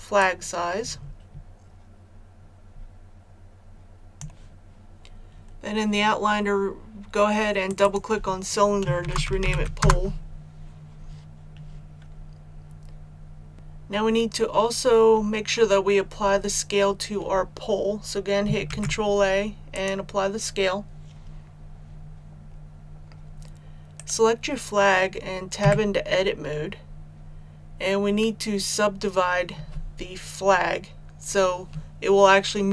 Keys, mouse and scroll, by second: 8.9-9.5 typing, 9.7 Return, 13.5 right click, 18.6 ctrl+a, 19.6 click, 23.9 right click, 25.5 Tab.